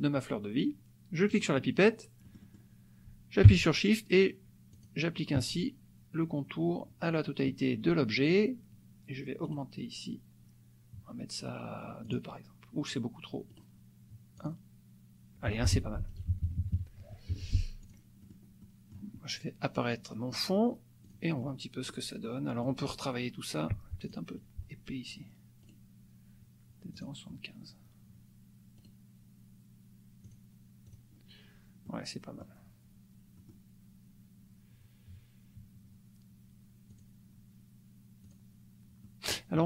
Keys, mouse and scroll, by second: 1.2 click, 2.2 click, 4.9 shift+click, 9.5 right click, 12.0 click, 13.5 right click, 14.3 click, 15.7 F1, 16.1 KP_Subtract, 17.3 Escape, 17.9 click, 18.3 click, 18.6 click, 20.3 click, 21.0 click, 21.4 click, 22.2 click, 24.0 click, 25.7 right click, 27.0 click, 28.8 click, 30.2 click, 30.8 click, 31.8 click, 33.3 click, 37.0 click, 38.2 click, 39.0 click.